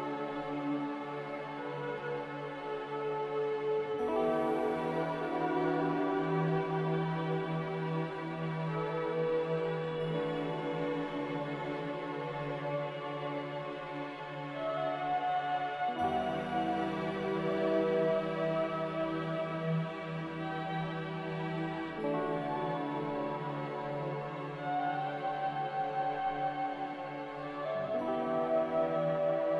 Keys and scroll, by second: 1.5 a, 11.8 ctrl+c, 17.9 ctrl+v, 22.7 n.